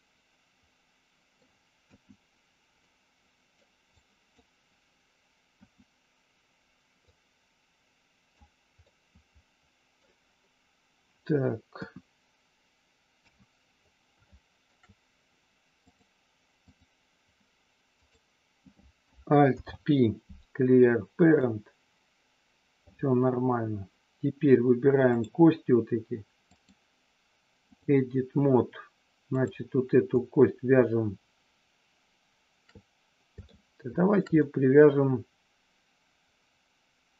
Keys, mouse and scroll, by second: 1.8 KP_1, 2.9 middle click, 3.9 click, 5.5 KP_1, 7.1-8.3 drag, 8.8 scroll up 1, 9.0-10.1 middle drag, 11.7 KP_1, 13.1 KP_3, 14.3 shift+middle click, 15.9 click, 17.9 click, 19.4 alt+p, 25.0 click, 26.7-27.9 drag, 29.4 click, 33.5 shift+middle click, 34.4-37.1 middle drag.